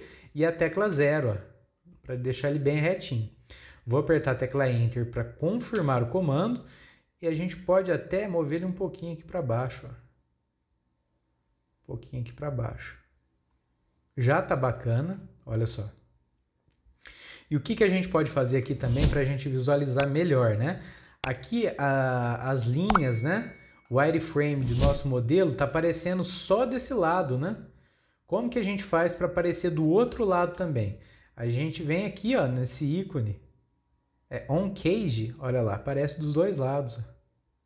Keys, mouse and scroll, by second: 8.7-11.8 drag, 14.8-15.1 scroll down 3, 15.1-18.1 middle drag, 18.2 scroll up 1, 18.9 scroll down 1, 19.3-23.4 shift+middle drag, 23.9-25.3 middle drag, 25.3 scroll down 1, 25.5-29.7 middle drag, 30.0-33.2 middle drag, 35.1 click, 35.9-37.6 middle drag.